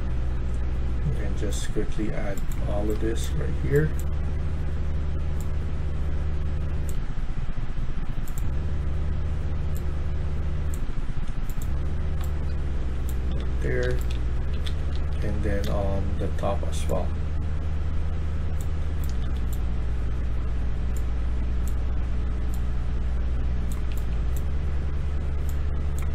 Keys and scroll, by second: 2.5-3.6 typing, 12.1-16.1 typing, 18.5-19.6 typing, 23.5-24.3 typing.